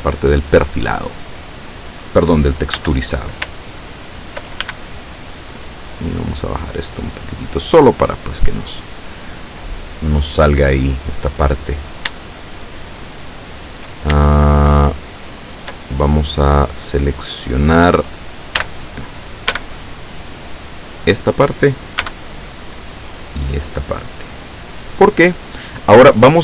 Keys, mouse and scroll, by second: 2.8 a, 4.7 ctrl+b, 4.8 ctrl+click, 6.1-8.1 drag, 10.0-10.6 scroll down 3, 12.4-14.0 shift+middle drag, 14.4-16.0 shift+middle drag, 18.7 a, 19.6 b, 20.0-21.2 drag, 22.1 b, 23.2-24.7 drag.